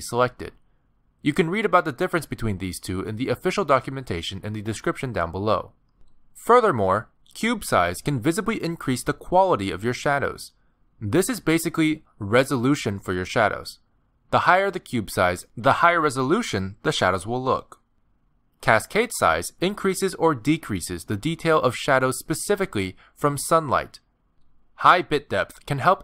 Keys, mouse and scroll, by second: 0.5 click, 2.2 click, 3.5 click, 7.3 click, 11.5 click, 14.9 click, 17.1 click, 18.1 click, 19.0-19.3 scroll down 3, 19.3 click, 19.7 click, 24.6 click, 25.0 click, 25.8 click.